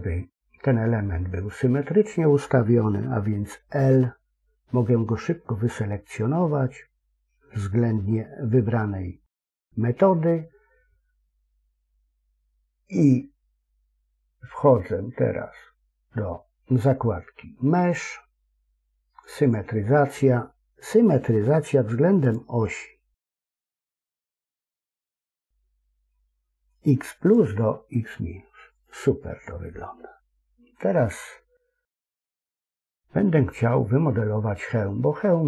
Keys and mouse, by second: 3.7 l, 17.7-19.5 drag, 22.3-27.2 drag, 32.5 KP_3.